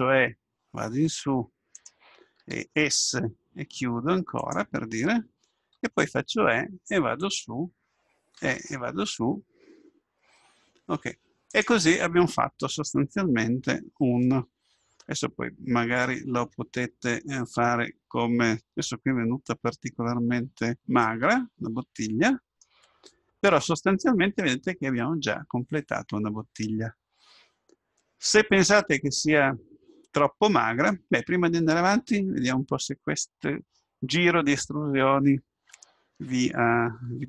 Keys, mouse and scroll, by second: 2.4 s, 5.9 e, 8.4 e, 12.7-14.7 middle drag, 19.9-21.3 middle drag, 23.6-26.1 middle drag.